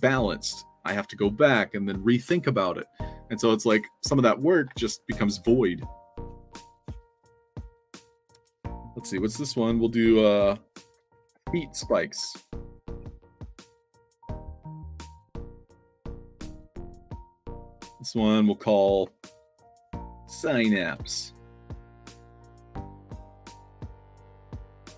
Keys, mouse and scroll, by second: 11.2-14.1 typing, 14.8 click, 15.5-15.9 middle drag, 16.5 click, 17.7 click, 22.8-24.1 typing.